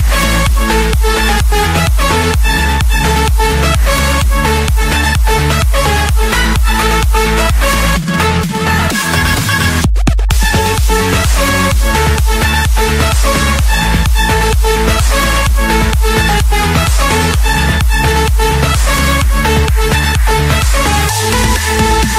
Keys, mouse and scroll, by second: 0.8 Escape, 2.7 typing, 3.0 Return, 3.8-4.8 drag, 5.8-6.5 typing, 7.9 Return, 9.4 Escape, 10.6 scroll, 11.0 click, 11.3 click, 11.3-11.7 scroll up 2, 12.6 m, 13.1 Return, 14.7 click, 17.6 click, 18.6 click, 18.8 click, 19.2 Return, 20.4 click, 21.8 click.